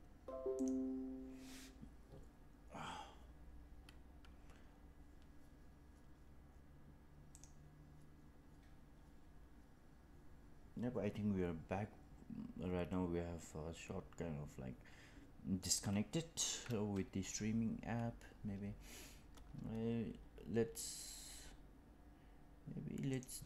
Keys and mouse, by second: 23.2-23.4 drag.